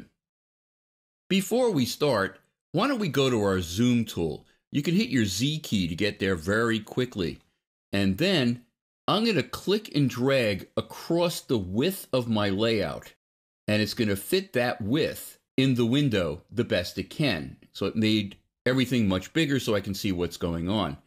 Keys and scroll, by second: 5.5 z.